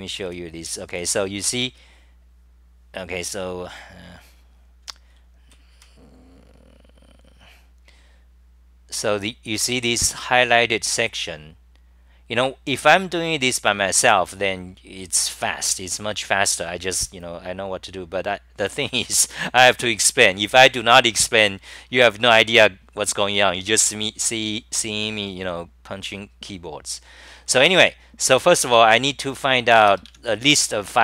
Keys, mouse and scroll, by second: 1.0 r, 1.6 6, 5.1-5.5 c, 5.8 6, 6.6-16.6 scroll up 125, 18.2-21.4 scroll up 11, 22.0 scroll up 1, 23.4 scroll up 11, 27.2 c, 27.4 c, 28.1 c, 28.7 6.